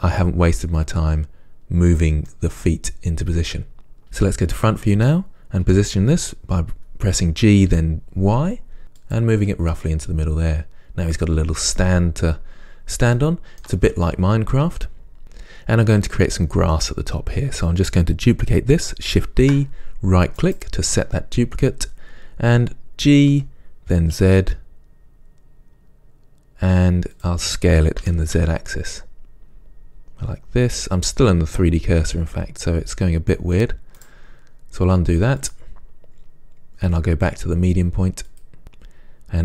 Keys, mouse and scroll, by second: 2.4-23.6 middle drag, 4.6 KP_3, 5.9 g, 12.5-12.9 scroll up 1, 19.6 shift+d, 23.6 g, 27.4 click, 28.3 s, 34.2 right click.